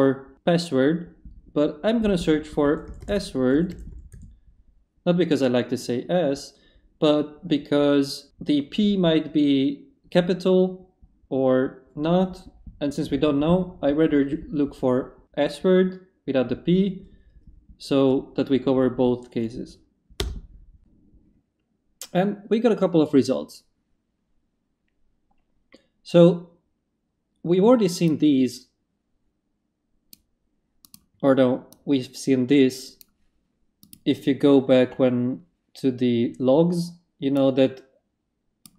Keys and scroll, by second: 2.4-4.4 typing, 20.2 Return.